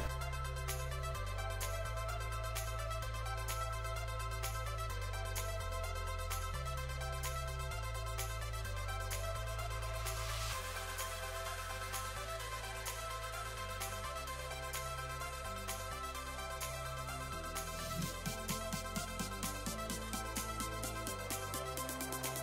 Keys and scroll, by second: 1.2 s, 1.6 s, 4.4 s, 8.7 s, 9.1 s, 18.9 s, 19.5 s.